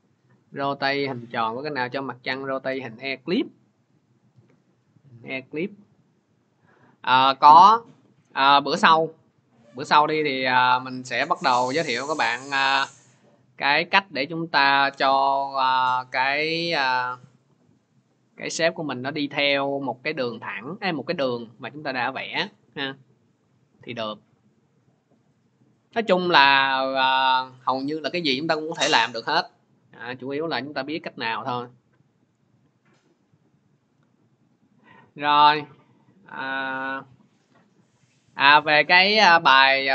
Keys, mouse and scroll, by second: 4.8 click, 9.5-14.5 drag, 22.4 click, 23.9 click, 24.0 click, 37.9 click, 39.5 click.